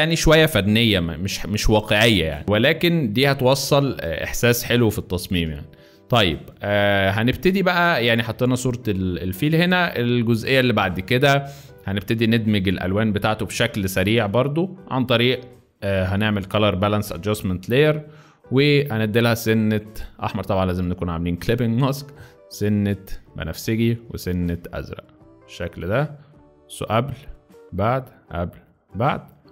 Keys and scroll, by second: 5.3 Escape, 8.3 space, 10.1 space, 17.2 space.